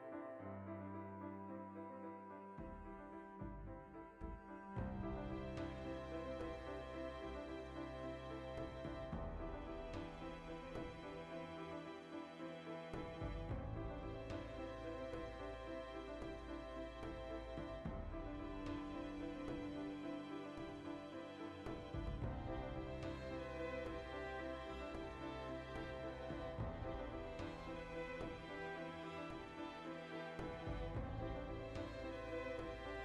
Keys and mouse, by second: 0.7 ctrl+z, 0.9 shift+right click, 1.3 g, 2.1 alt+shift+right click, 3.0 ctrl+b, 4.9 alt+right click, 5.8 ctrl+x, 7.3 z, 7.4-10.6 middle drag, 8.1 z, 8.5 Tab, 9.0 q, 10.6 click, 10.9-12.4 shift+middle drag, 12.4-14.3 drag, 14.3 shift+middle click, 15.0 click, 15.2 shift+middle click, 15.5-16.9 drag, 16.9-19.2 shift+middle drag, 19.0 Tab, 19.2 alt+right click, 19.4-23.4 shift+middle drag, 20.7 ctrl+b, 23.4 click, 24.1 alt+right click, 24.4 alt+q, 24.6-25.7 shift+middle drag, 25.1-29.9 typing, 26.1 click, 26.3 alt+right click, 27.2 alt+right click, 28.2 alt+right click, 28.9 click, 29.0 alt+right click, 29.8 click, 30.5 click, 30.6 alt+right click, 31.0 g, 31.5-33.0 middle drag, 32.1 Tab.